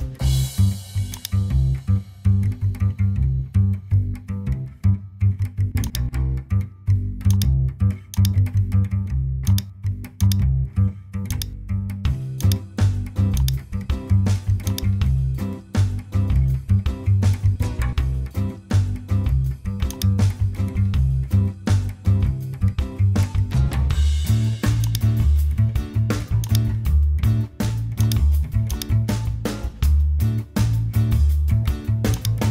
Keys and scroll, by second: 2.7 Return, 17.5-21.5 typing.